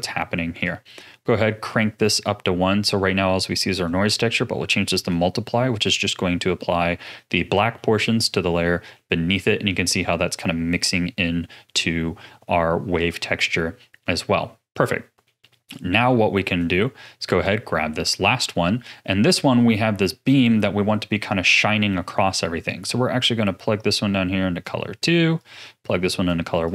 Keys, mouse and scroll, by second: 0.6-3.6 drag, 3.7-6.4 drag, 6.4-7.2 scroll up 3, 7.7-10.7 middle drag, 14.8-15.7 middle drag, 15.7 click, 17.2 click, 18.3 middle click, 18.7-19.8 scroll down 1, 19.8-22.6 middle drag, 22.6 click, 25.3 click, 26.6 click.